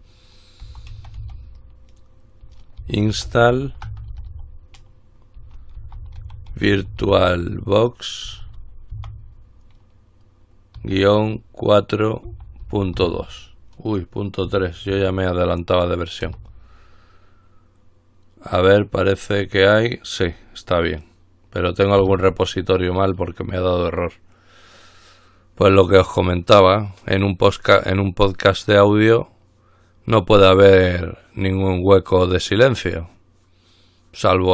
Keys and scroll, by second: 0.0-9.1 typing, 11.0 typing, 12.2-13.7 typing, 14.7-15.1 typing, 16.4 Return, 17.0 typing, 18.9 typing, 22.2 Return.